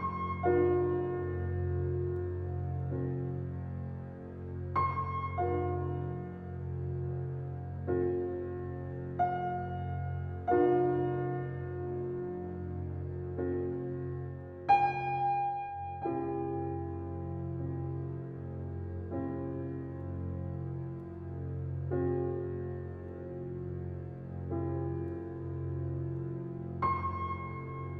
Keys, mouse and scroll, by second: 0.8 alt+middle drag, 1.4 g, 3.3 g, 4.6 shift+middle click, 5.5 Tab, 5.8 scroll up 5, 6.1 shift+middle click, 6.9 click, 7.7 click, 8.3 click, 9.4 shift+click, 10.4 shift+click, 11.5 shift+click, 12.2 middle click, 12.6-13.0 scroll down 3, 13.0 e, 14.0 Tab, 14.2-14.7 scroll down 1, 14.7 Tab, 15.6 alt+z, 15.8 click, 16.7 scroll down 3, 17.1 click, 17.4-18.7 drag, 18.7 scroll down 3, 18.9 click, 20.0 click, 20.0 Tab, 21.1 shift+middle drag, 21.3-21.8 shift+scroll up 1, 21.8 g, 24.1 Tab, 25.5 click, 26.2 g.